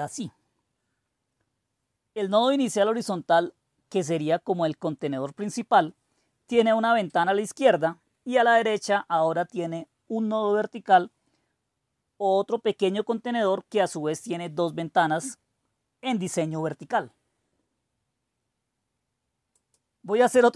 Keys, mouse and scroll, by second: 19.5-20.5 drag.